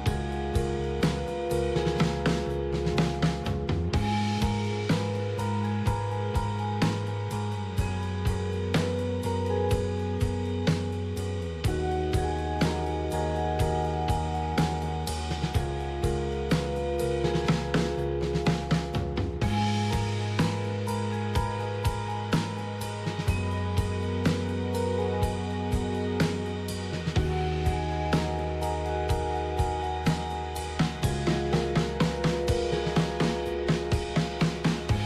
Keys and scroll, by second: 4.2 alt+Tab, 6.2-10.4 typing, 12.3-13.1 typing, 13.3 Tab, 14.9 Return, 16.9-20.1 typing, 17.7 Return, 23.7 typing, 24.2 Tab, 26.0-27.6 typing, 29.3-35.0 typing.